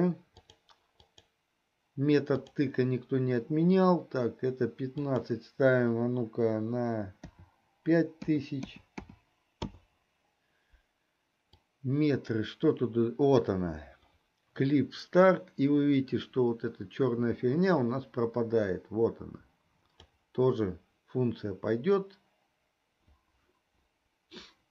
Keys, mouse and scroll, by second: 1.5-2.9 drag, 5.0-10.1 drag, 8.9 KP_0, 11.9-20.6 drag.